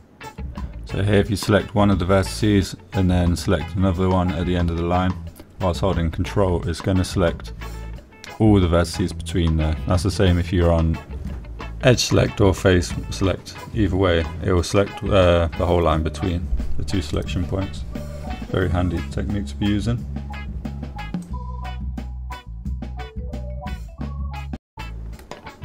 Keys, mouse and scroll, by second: 0.4 middle click, 0.8 shift+middle click, 1.3 middle click, 5.7 middle click, 11.2 middle click, 13.8 middle click, 15.1 middle click, 15.8 middle click, 17.1 shift+click, 17.4 middle click, 18.8 middle click, 20.0 ctrl+click, 20.5 middle click, 21.5 middle click, 22.2 middle click, 22.8 s, 23.0 x, 25.5 click.